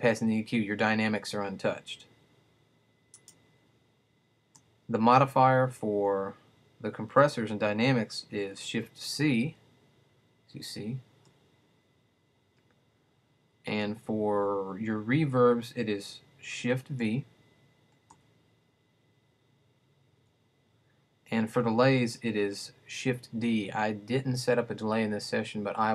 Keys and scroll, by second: 8.4 shift+c, 16.6 shift+v, 23.1 shift+d.